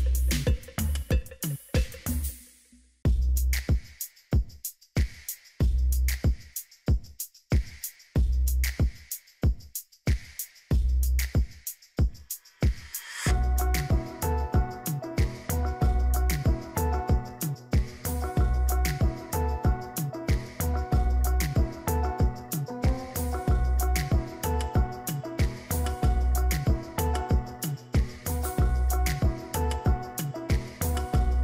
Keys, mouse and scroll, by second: 5.6-7.2 scroll down 2, 17.5-18.2 scroll down 3, 21.9-22.9 scroll down 1, 25.7-27.5 scroll down 2.